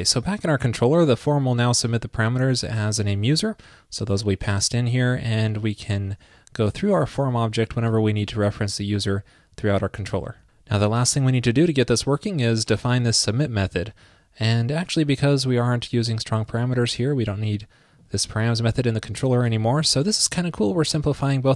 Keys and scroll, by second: 5.8 super+c, 7.2 super+v, 10.1 super+s, 19.5 super+s.